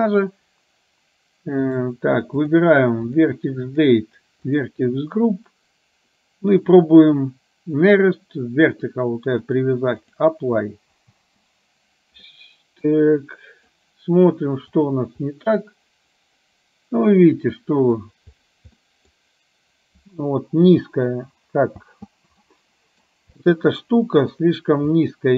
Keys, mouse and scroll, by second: 1.6 click, 3.8 click, 9.5-10.4 drag, 11.3 space, 12.3-13.8 middle drag, 14.9 click, 15.4-18.1 middle drag, 19.0 middle drag, 21.9 space, 22.5-23.0 middle drag, 23.5-24.3 middle drag, 25.0-25.3 middle drag.